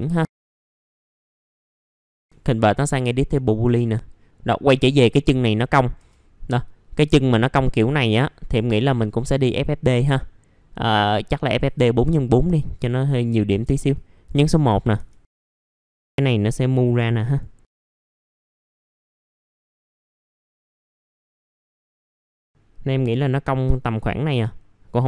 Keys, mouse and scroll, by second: 0.3 scroll up 1, 0.4 click, 1.0 scroll down 1, 1.2 click, 1.4 scroll up 1, 1.6 click, 2.0 middle click, 2.8 middle click, 3.1 scroll down 1, 3.5 middle click, 3.9-4.5 scroll up 1, 4.5 middle click, 4.9-5.5 scroll down 1, 6.0 1, 8.2 click, 14.5-14.9 scroll up 1, 15.8-17.7 drag, 18.0 middle click, 18.3-18.7 scroll down 1, 18.7-20.3 drag, 20.3 scroll up 1, 20.4 alt+middle click, 21.3 alt+middle click, 21.7 scroll down 1, 21.8 scroll up 1, 22.0 middle click, 24.5 scroll up 1.